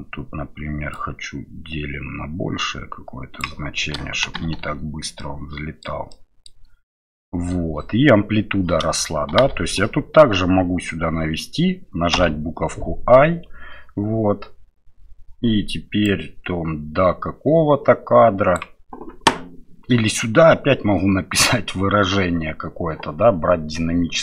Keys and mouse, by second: 0.9-3.5 drag, 4.2 shift+Left, 4.6 space, 5.2 middle click, 6.1 middle click, 9.3 shift+Left, 12.1 i, 16.0-18.6 drag.